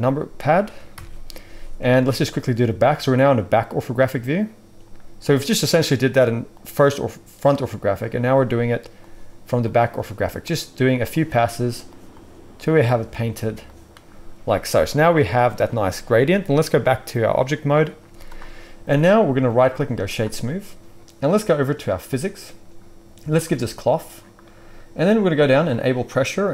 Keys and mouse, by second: 0.9 ctrl+KP_1, 18.0 z, 19.4-22.2 middle drag, 19.4-26.5 right drag, 23.4-25.7 drag, 23.4-25.7 middle drag, 26.4-26.5 drag, 26.4-26.5 middle drag.